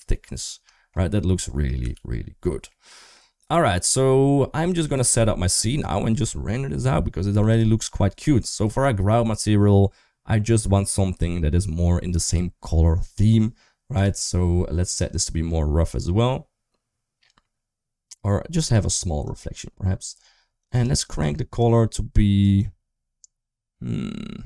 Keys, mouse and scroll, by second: 0.6 shift+middle drag, 2.3 ctrl+s, 2.5-3.0 middle drag, 4.6 middle click, 7.4 click, 8.1 shift+middle click, 13.8 click, 15.0 click, 19.1 click.